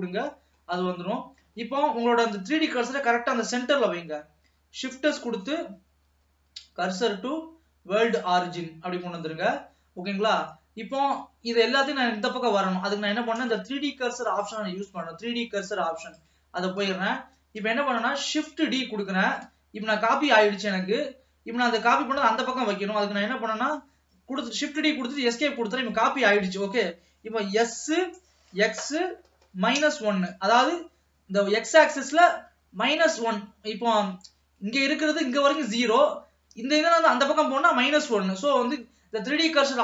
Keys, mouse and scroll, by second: 0.8 scroll down 2, 1.0 middle click, 1.8-3.1 scroll up 1, 3.1-5.9 middle drag, 5.9 shift+s, 9.4-12.4 middle drag, 14.5-16.8 drag, 16.8-17.3 scroll down 1, 17.3-18.5 middle drag, 18.5 shift+d, 27.7 s.